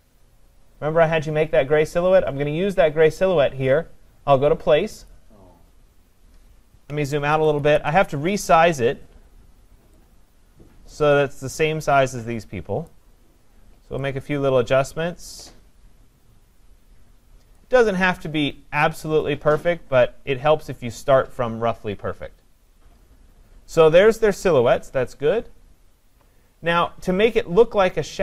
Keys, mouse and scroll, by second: 5.1 click, 7.3 ctrl+-, 7.6 ctrl+-, 11.0 click, 12.9 click, 17.5 click, 20.9 click.